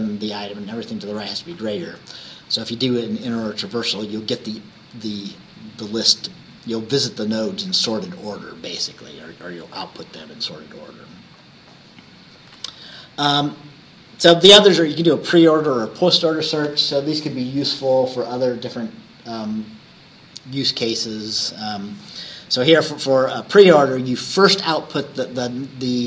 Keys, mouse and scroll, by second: 12.6 Right.